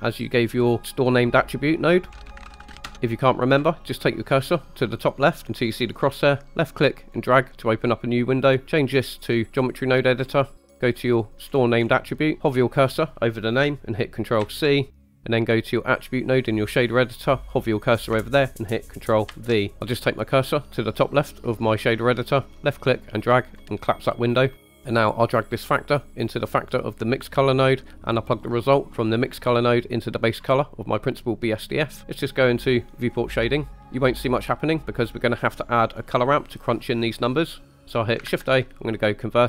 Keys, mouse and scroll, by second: 2.1 shift+click, 5.8 click, 8.6-9.6 drag, 10.2-10.6 scroll down 2, 10.7 middle click, 11.5-12.0 scroll up 4, 12.2 middle click, 14.4 ctrl+c, 15.0 middle click, 19.3 ctrl+v, 22.5 click, 24.6 middle click, 25.6-27.3 drag, 28.5-30.4 drag, 33.3 drag, 33.7 middle click, 36.9 middle click, 37.5 click, 38.3 shift+a.